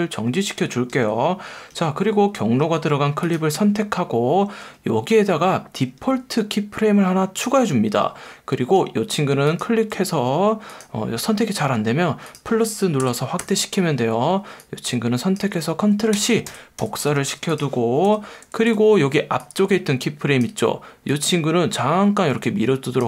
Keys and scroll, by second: 0.9 F1, 1.7 F1, 2.6 F1.